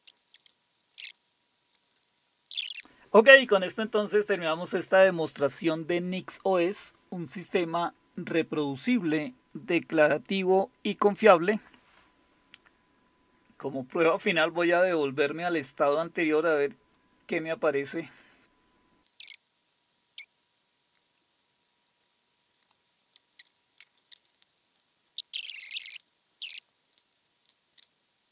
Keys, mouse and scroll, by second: 0.1 click, 0.4 click, 1.2 click, 1.4 click, 1.8 click, 2.0 click, 2.2 scroll down 2, 2.4-16.2 scroll up 2, 16.2 click, 19.5 click, 20.0 click, 20.4 click, 20.6 click, 21.1 click, 21.3 click, 21.9 click, 22.1 click, 22.4 click, 22.6 Right, 22.7 Return, 26.5 click.